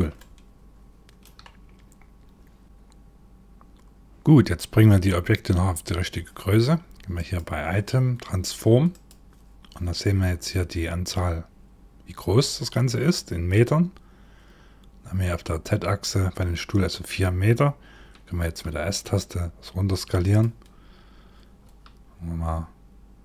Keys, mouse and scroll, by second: 2.6 click, 6.7 click, 8.5 click, 18.0 s, 20.3-21.2 scroll up 6, 21.2 s.